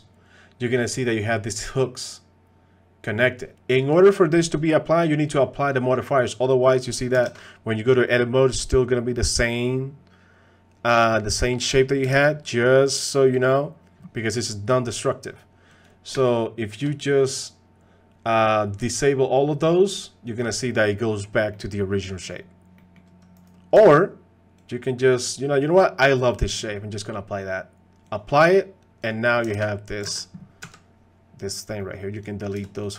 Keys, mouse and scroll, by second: 6.7 click, 7.3 ctrl+Tab, 12.2 ctrl+Tab, 15.7 click, 16.4 shift+click, 19.2-20.3 drag, 20.9 middle click, 21.5-22.3 middle drag, 22.8 middle click, 24.6-25.2 drag, 28.1 click, 29.0 click, 29.2 drag, 30.0 ctrl+Tab, 30.1 ctrl+Tab, 30.6 g, 31.8 click, 32.1 click.